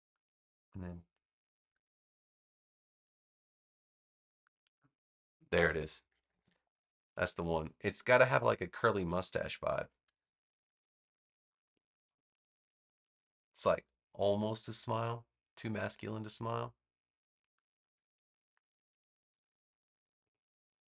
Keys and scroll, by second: 6.2 alt+=, 10.0 super+=, 10.9 space, 13.0 v, 19.2 super+-, 20.4 super+-.